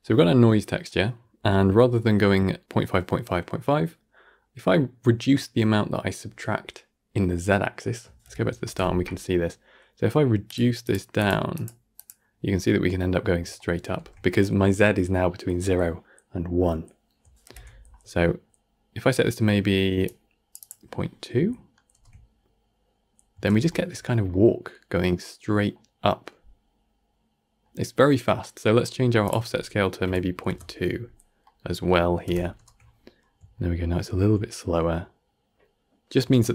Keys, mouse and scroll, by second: 0.0-2.5 middle drag, 2.5-3.0 scroll up 1, 3.0-8.1 middle drag, 8.1 shift+Left, 8.5 shift+space, 10.3-13.2 drag, 13.2 scroll down 3, 13.4-13.8 shift+middle drag, 13.8 shift+space, 17.3 shift+Left, 17.8-19.2 scroll up 1, 19.9-21.4 drag, 21.4-21.8 shift+middle drag, 21.8 shift+space, 23.3 shift+space, 23.6-23.9 shift+middle drag, 23.9-24.2 scroll down 3, 24.2-28.1 middle drag, 28.1 scroll down 1, 28.3 middle click, 28.7-29.1 scroll up 1, 29.1-31.1 drag, 31.1 scroll down 1, 31.3 middle click, 32.1 shift+Left, 32.4 shift+space, 33.1-33.4 scroll up 1, 33.4-33.9 shift+middle drag, 33.9-34.4 scroll up 1, 34.4-36.2 shift+middle drag, 36.2 shift+space.